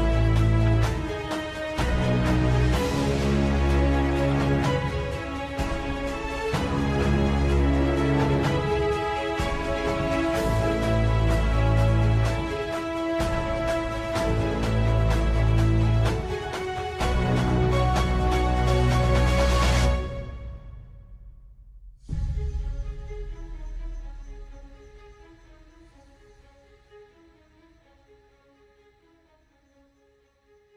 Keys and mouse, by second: 2.7 e, 4.9 s, 6.4 e, 9.1 e, 12.2 ctrl+z, 13.0 KP_3, 15.6 e, 17.5 s, 19.5 e, 20.8 s, 23.2 e, 28.9 s.